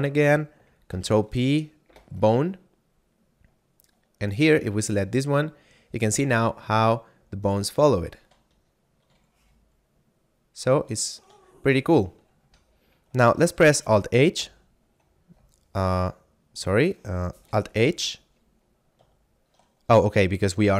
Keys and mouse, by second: 0.9 ctrl+p, 1.6 Return, 4.2 right click, 4.8 g, 7.8 right click, 8.6 shift+middle click, 9.3 g, 11.1 right click, 11.6 shift+middle click, 12.8 F9, 14.3 alt+h, 16.1 middle click, 17.8 alt+h, 19.2 shift+middle click.